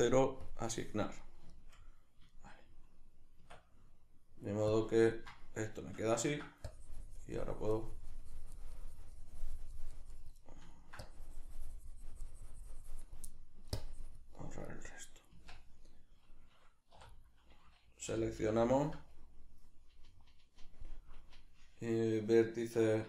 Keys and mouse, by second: 1.2-6.7 middle drag, 3.4 Tab, 6.7-10.4 drag, 10.4 middle click, 11.0-13.3 drag, 13.3 middle click, 13.8 click, 14.7 right click, 15.4 Tab, 17.1 right click, 18.1 l, 22.8 1.